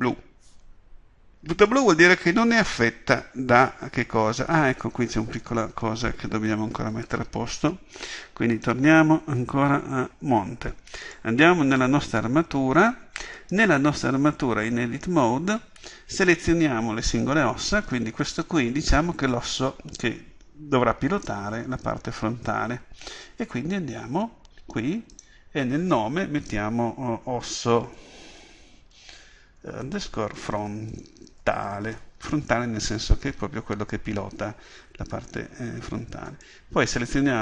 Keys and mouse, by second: 8.0-11.0 drag, 11.0 right click, 13.4-14.5 drag, 37.1-37.4 drag.